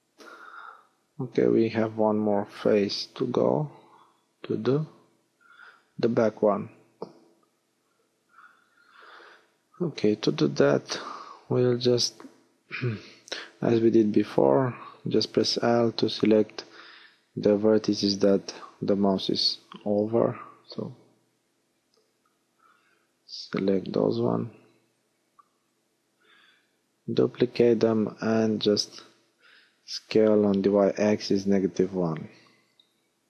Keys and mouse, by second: 0.3 KP_3, 2.6 KP_Decimal, 8.4-10.8 middle drag, 13.4 l, 16.4 middle click, 20.2-24.9 right drag, 25.8 shift+d, 27.8 middle click, 30.6 middle click, 32.1 s.